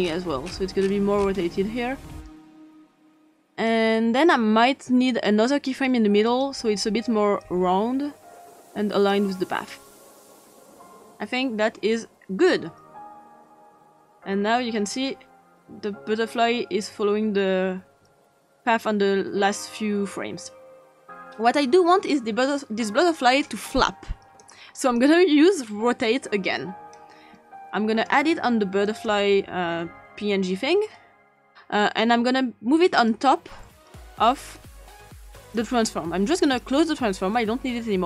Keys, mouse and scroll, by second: 0.4-0.8 scroll down 2, 0.8 scroll up 2, 0.9 scroll down 1, 1.1-1.8 scroll up 2, 1.8-2.4 scroll up 1, 3.2 click, 5.1 click, 6.3 click, 7.4-9.1 drag, 13.3-20.5 drag, 23.1 click, 24.4 click, 26.9-28.1 drag, 28.9 click, 32.9 click, 34.5-35.6 drag, 36.4 click.